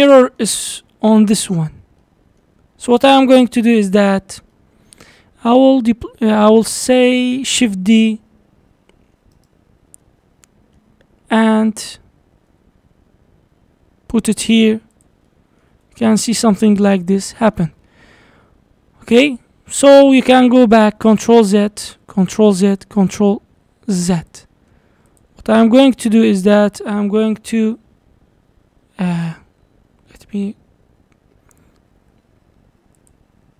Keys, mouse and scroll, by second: 3.7 click, 4.1-4.5 scroll down 4, 4.5-5.8 middle drag, 5.8-6.3 scroll down 4, 6.3 middle click, 6.9-7.6 scroll up 4, 7.7 shift+d, 9.7-10.0 scroll down 3, 10.0-11.4 middle drag, 11.4 g, 15.3 middle click, 15.7 Tab, 16.0-16.5 middle drag, 16.5 click, 17.0-17.8 middle drag, 17.8 scroll up 5, 18.6-19.3 scroll down 5, 20.4 ctrl+z, 20.7 ctrl+z, 21.0 ctrl+z, 22.0 ctrl+z, 22.8 ctrl+z, 23.2 ctrl+z, 24.3 click, 24.7-25.1 scroll up 5, 25.1 click, 26.4 shift+click, 28.3 p, 30.5 ctrl+p, 33.0 click.